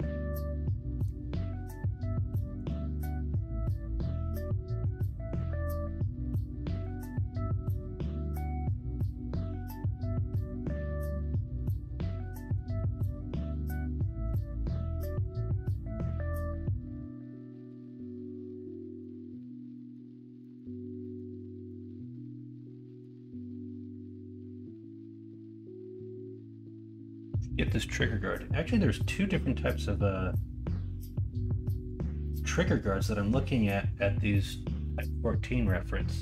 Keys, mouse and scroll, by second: 8.8 middle click, 9.5 alt+z, 10.3-11.3 middle drag, 12.3 middle click, 13.1 middle click, 13.9 shift+middle click, 14.7 middle click.